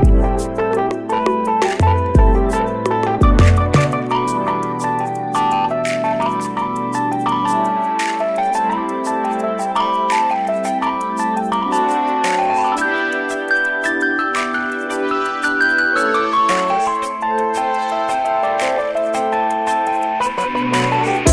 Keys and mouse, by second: 3.2 shift+click, 14.9-16.4 drag.